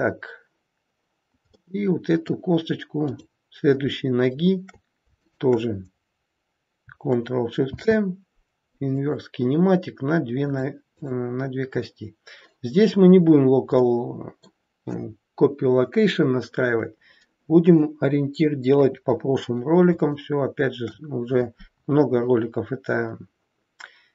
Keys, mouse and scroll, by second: 1.6 middle click, 3.1 click, 5.2 shift+click, 7.6 ctrl+shift+c, 10.4 click, 10.9 click, 13.3-13.7 scroll down 1, 13.7 middle click, 18.6 KP_3, 19.4-19.8 scroll up 2, 20.1 shift+middle click.